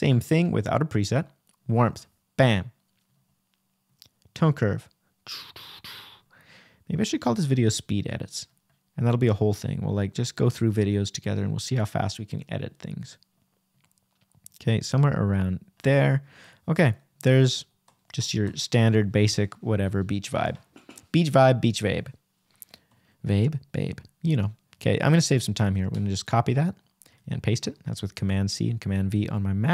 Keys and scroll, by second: 9.3 \, 10.4 \, 15.4 Right, 17.1 Left, 18.0 super+Left, 18.0 super+c, 18.4 super+Return, 18.7 Right, 19.6 super+Right, 20.1 super+v.